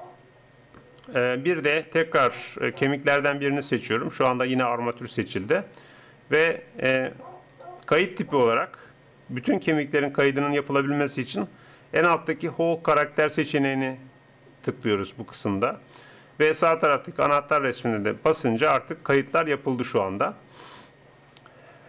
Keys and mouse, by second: 2.8-4.7 drag, 5.9-9.5 drag, 18.3-20.9 drag.